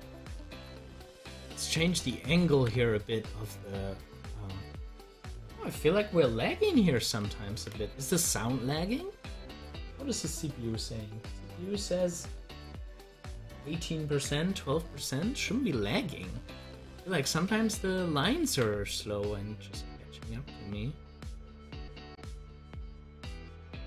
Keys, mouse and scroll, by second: 2.5 ctrl+z, 6.7 ctrl+z, 15.5-18.5 drag, 18.5 ctrl+z.